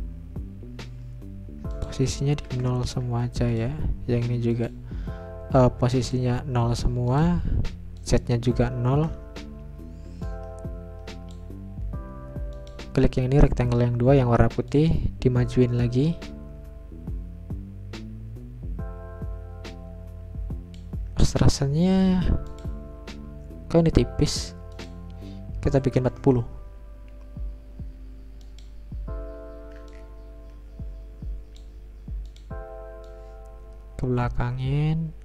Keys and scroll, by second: 2.5 0, 3.0 Return, 6.7-8.3 typing, 10.1 Return, 25.5-26.4 typing, 27.7 Return.